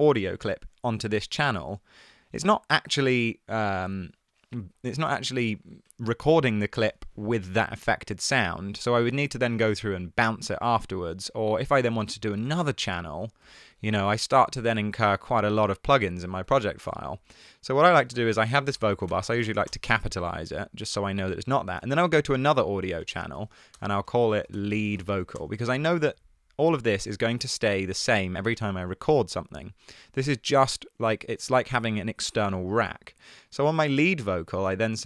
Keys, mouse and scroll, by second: 12.5 super+d, 16.6 shift+Left, 16.8 BackSpace, 18.3 super+r, 18.6-19.7 typing, 21.9 super+t, 23.2 super+r, 23.8-26.5 typing.